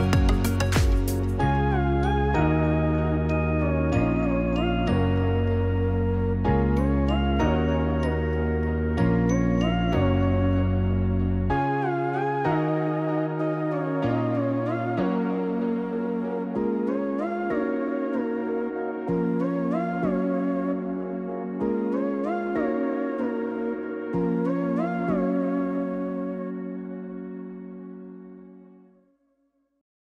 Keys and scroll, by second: 6.2 0, 23.1 ctrl+d, 29.5 u.